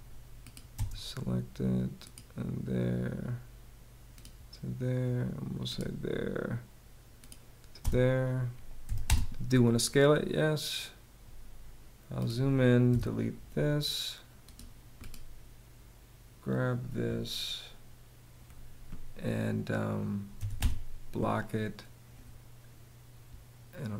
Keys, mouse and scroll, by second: 0.3 space, 7.4 space, 8.5 y, 8.7 space, 12.5 BackSpace, 20.0 b, 20.2 space.